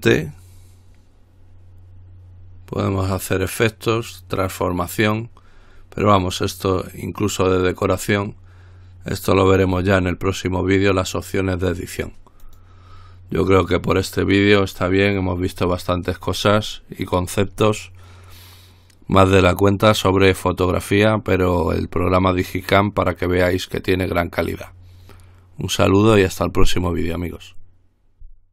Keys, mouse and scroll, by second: 12.7 click.